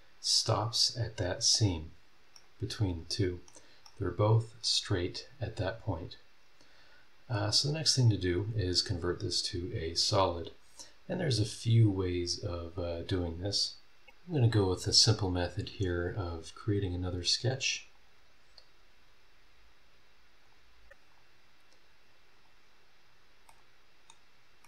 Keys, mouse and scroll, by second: 1.9 scroll down 2, 2.3 middle click, 2.4 right click, 2.5 scroll up 2, 3.8 middle click, 3.9 right click, 4.9-5.9 scroll down 3, 6.1 scroll up 1, 7.1 scroll up 1, 7.6 click, 14.2 scroll down 2, 14.7 scroll up 2, 15.3 scroll down 2, 15.9 click, 17.9 click, 20.4 click, 21.1 click, 21.3-22.3 middle drag, 22.3 click, 22.6 middle click, 23.0 scroll down 1, 23.2 middle click, 23.6 click, 23.6 right click, 24.6 middle click.